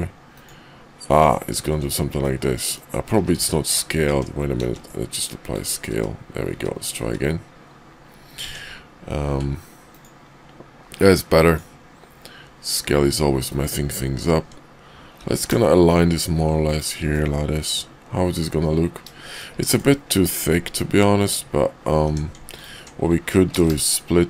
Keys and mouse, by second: 1.2 ctrl+click, 2.1 middle click, 3.0 ctrl+z, 3.4 ctrl+z, 4.0 Tab, 4.6 ctrl+a, 5.9 `, 6.5 `, 7.0 `, 8.4 Tab, 11.4 ctrl+click, 13.3 ctrl+click, 15.1 g, 17.1-19.4 middle drag, 19.6 shift+middle click, 20.3 middle click, 22.0 Tab, 23.5 ctrl+b.